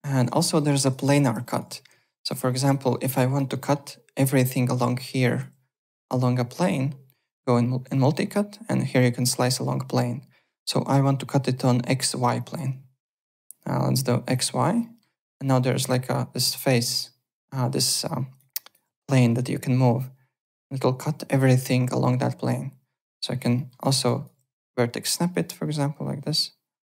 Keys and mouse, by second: 0.0-1.6 typing, 0.0 alt+click, 0.5 alt+middle click, 0.7 alt+right click, 1.4 alt+click, 2.1 click, 2.3 alt+click, 2.8 alt+middle click, 3.1 alt+click, 3.5 alt+middle click, 5.2 alt+click, 7.2 click, 12.3 alt+click, 14.3 click, 14.8 alt+middle click, 15.7 click, 18.5 alt+click, 19.3 click, 23.5 alt+middle click, 24.0 alt+click, 24.6 v, 25.1 click.